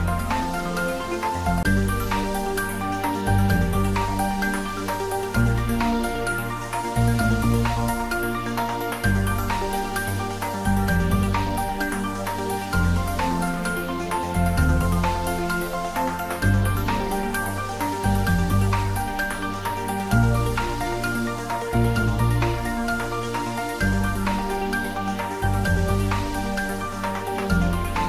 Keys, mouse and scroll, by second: 0.2 click, 1.3-3.1 scroll up 1, 3.5-5.3 scroll up 1, 6.3-8.2 scroll up 1, 10.8 click, 15.6 click, 18.9 click, 19.4 ctrl+s, 21.6 ctrl+s, 23.5 click, 27.5 click.